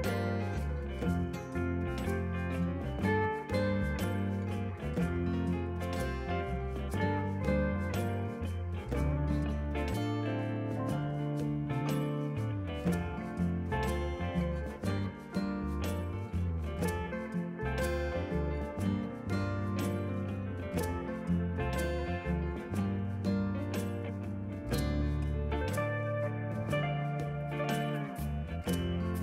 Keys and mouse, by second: 15.5 click, 17.2 Right, 17.4 click, 17.7 Left, 18.0 click.